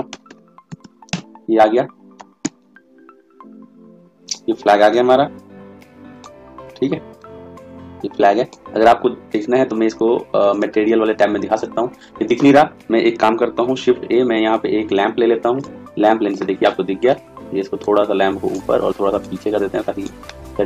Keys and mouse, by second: 0.0 r, 2.3 s, 4.9 s, 7.2 click, 9.2 click, 13.7 shift+a, 16.6-17.8 middle drag, 17.8 click, 20.5-20.6 middle drag.